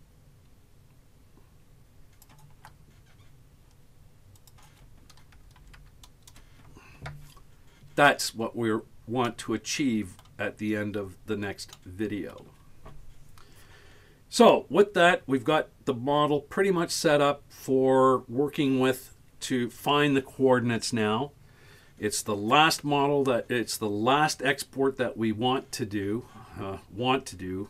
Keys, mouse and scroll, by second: 4.4-8.0 drag, 8.5-8.8 scroll down 4, 9.1 scroll up 1, 9.4 middle click, 10.7-11.6 scroll up 3, 11.8 middle click.